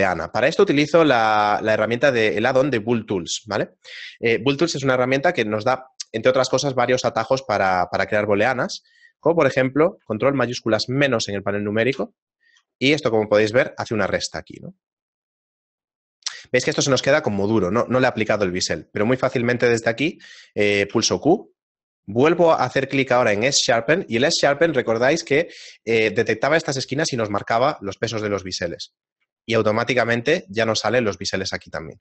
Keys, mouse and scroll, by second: 12.0 ctrl+shift+KP_Subtract, 13.7 shift+middle click, 17.5 shift+middle click, 18.6 right click, 19.0 middle click, 20.6 shift+middle click, 21.3 q, 29.4 shift+middle click, 30.3 a, 31.4 middle click, 31.8-32.0 scroll down 3.